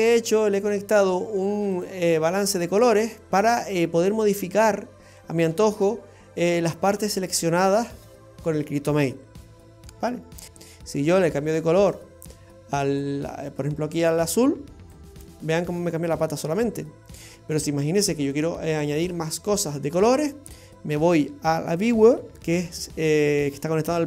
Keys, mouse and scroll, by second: 1.8 click, 2.2-2.6 scroll up 4, 2.8 middle click, 5.7 click, 10.4 click, 21.9 click.